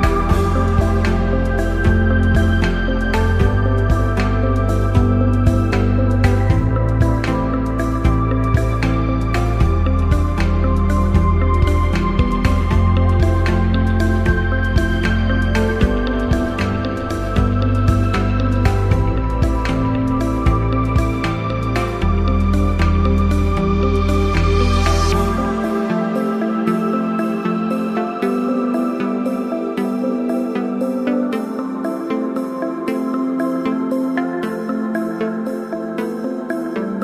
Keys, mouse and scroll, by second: 0.0-0.7 typing, 1.7 click, 2.3-3.0 typing, 3.9 click, 6.6 click, 8.7-9.1 drag, 9.9-10.6 typing, 11.9 click, 14.1-14.6 drag, 16.8 click, 17.1-17.9 shift+drag, 19.7 shift+drag, 27.7-28.1 drag, 30.5 7, 32.0 click, 36.7-37.0 drag.